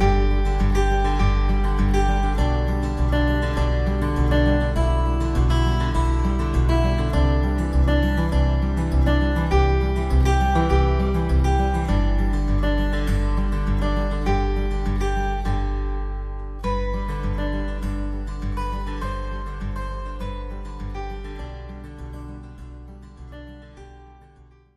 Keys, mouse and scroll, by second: 0.4 alt+middle click, 2.3 ctrl+alt+middle click, 6.6 alt+middle click, 8.3 alt+middle click, 8.3 alt+middle click, 14.5 alt+middle click.